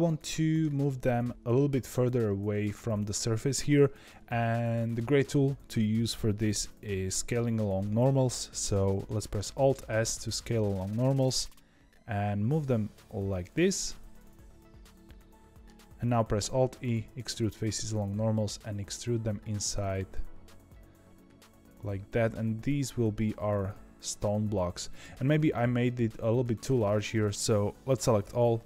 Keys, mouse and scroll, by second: 0.6-1.3 scroll down 1, 1.3-1.8 scroll up 1, 1.8-4.0 scroll up 1, 9.7 alt+s, 13.7-16.3 middle drag, 16.3 alt+e, 25.8-27.2 middle drag, 27.2 a, 27.3 ctrl+z, 28.2 a, 28.5 middle click.